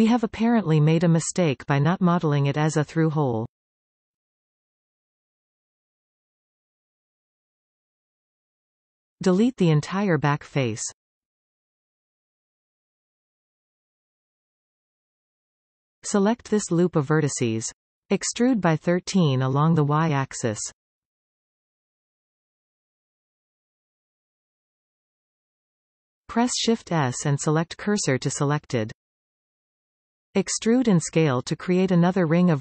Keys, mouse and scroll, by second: 0.1 middle click, 0.9-1.5 scroll up 5, 3.6-4.2 scroll down 4, 4.2 middle click, 5.0 scroll down 2, 5.3 middle click, 6.1 z, 7.7 scroll up 3, 8.2-11.0 middle drag, 11.0 click, 12.1 click, 12.9 x, 14.4-16.1 middle drag, 16.1 click, 16.4-17.4 scroll up 11, 18.6 alt+shift+click, 19.3-19.6 scroll down 6, 20.5 e, 23.4-23.8 scroll down 4, 23.8 middle click, 24.3 scroll up 2, 26.6 shift+s, 30.6-32.6 scroll down 1.